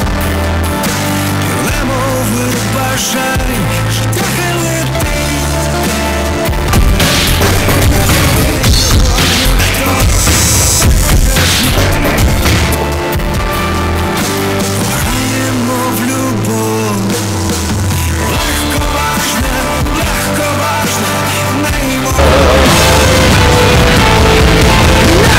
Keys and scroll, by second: 0.6 Return, 12.8 Page_Down.